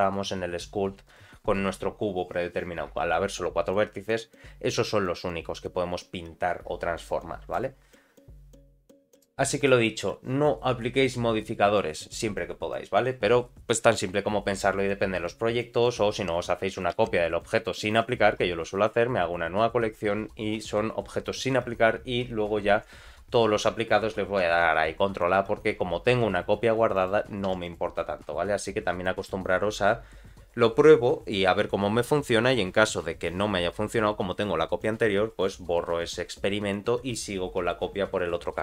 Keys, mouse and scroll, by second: 17.1 shift+d.